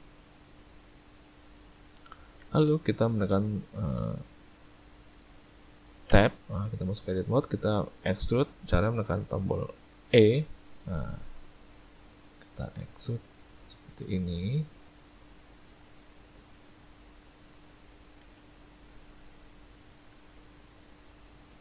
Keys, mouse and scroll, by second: 1.5 middle click, 2.2 ctrl+middle click, 2.5 shift+middle click, 3.1 middle click, 3.7 shift+middle click, 4.1 middle click, 4.5 ctrl+middle click, 6.7 Tab, 7.4 middle click, 10.2 e, 17.3 middle click, 18.3 shift+space, 20.2 shift+space.